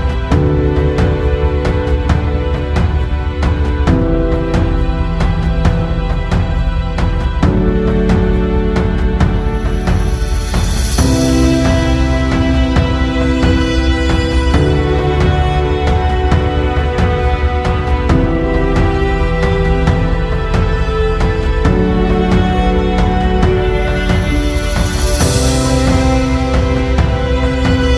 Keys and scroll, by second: 27.4 Tab.